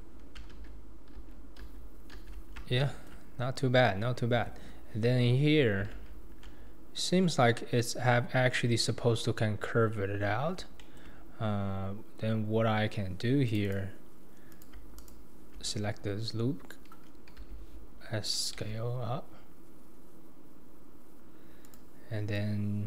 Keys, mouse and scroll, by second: 0.5 alt+z, 1.2 alt+z, 1.6 alt+z, 2.1 alt+z, 2.5-2.8 scroll down 2, 2.8 shift+middle drag, 3.1 scroll down 1, 3.2-4.3 scroll up 4, 4.3 Tab, 5.9 alt+z, 8.8-10.3 scroll up 2, 10.3 scroll down 3, 10.8 shift+middle click, 11.2-13.5 scroll up 2, 13.5 click, 13.7 click, 14.5 click, 15.0 alt+click, 15.8-16.3 scroll down 2, 17.4 d, 18.6 s.